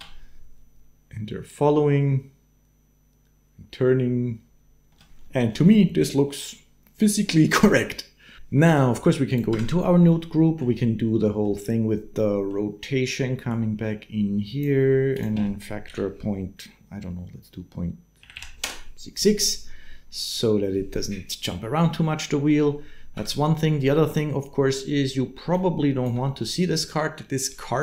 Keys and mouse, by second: 4.9 space, 5.0 shift+middle click, 9.1 middle click, 9.3 Tab, 9.9 middle click, 11.1 middle click, 12.0 middle click, 13.3 click, 13.6-18.4 drag, 18.1 6, 23.0 Tab, 23.6 middle click, 25.4 ctrl+click.